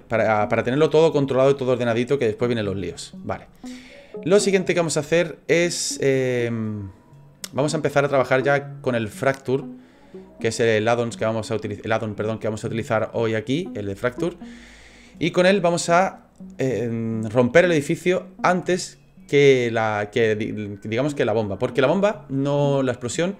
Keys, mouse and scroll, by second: 0.0 middle click, 2.5 scroll down 4, 3.0 shift+middle click, 3.5 middle click.